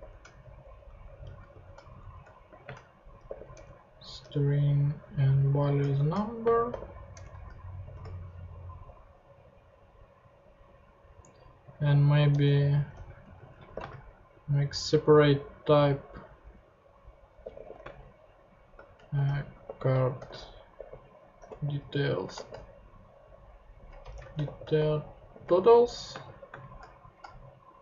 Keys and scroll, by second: 0.0 shift+;, 0.6 shift+Down, 1.1 alt+Right, 1.5 alt+shift+;, 2.0 shift+Down, 2.5-4.2 typing, 4.6 Down, 5.8 shift+Down, 5.9-7.2 typing, 7.8 shift+super+p, 12.3 Return, 12.7-14.2 typing, 17.2-22.3 typing, 24.0-26.5 typing.